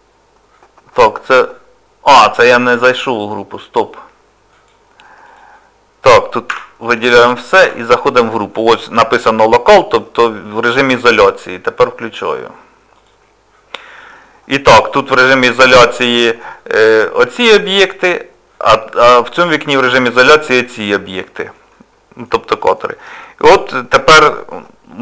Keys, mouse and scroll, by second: 4.5 click, 5.2 click, 6.5 a, 7.6 KP_Divide, 13.2 click, 14.9 click, 21.7 middle click, 22.5 shift+middle click, 23.2 middle click.